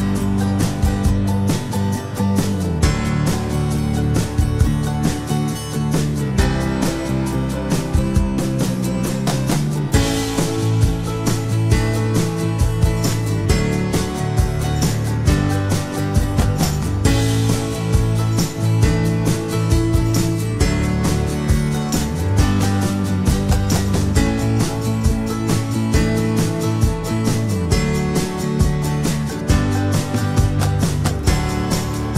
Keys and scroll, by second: 1.8 Down, 3.8 Return, 16.4 Return, 25.4 Down.